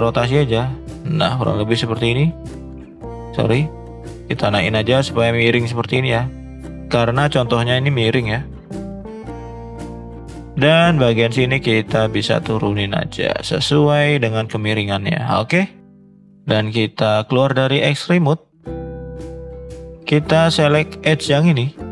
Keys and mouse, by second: 0.1 r, 1.8 click, 2.1 click, 2.4 click, 3.1 ctrl+z, 3.7 click, 6.9 middle click, 9.9 shift+middle click, 10.7 shift+middle click, 11.1 click, 12.0-14.2 drag, 15.8 middle click, 17.3 click, 18.3 middle click, 18.7 middle click, 19.6 click, 21.0 alt+shift+click.